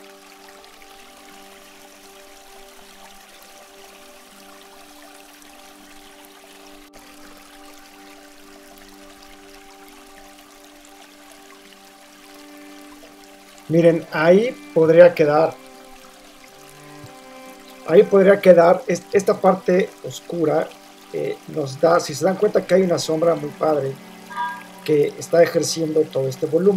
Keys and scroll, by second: 1.9 alt+shift+super+v, 3.9 super+t, 4.0 super+-, 5.3 super+Return, 5.4 super+0, 9.7 Return, 12.0 Return.